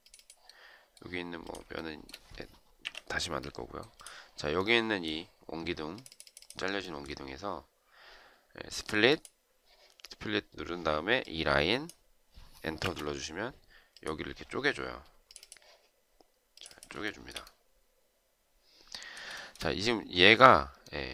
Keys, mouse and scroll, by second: 1.6 shift+right click, 2.7 Delete, 12.6 Return, 16.8 shift+right click, 19.1 shift+right click.